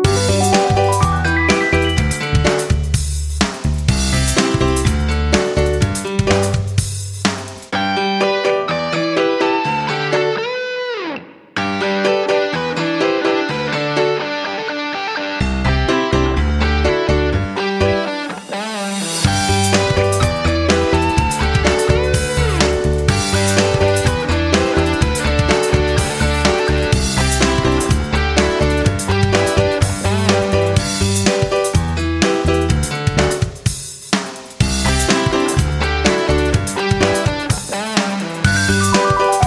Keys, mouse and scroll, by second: 1.0-3.4 drag, 4.3-7.4 drag, 15.7 Right, 15.9 Right, 16.7 Right, 18.1 click, 18.5 click, 21.7 shift+Up, 23.7-29.4 drag, 31.7 Right, 31.9 Right, 32.1 Right, 32.2 typing, 33.7 click, 36.7 Left, 37.0-37.4 typing, 39.0 ctrl+shift+Right.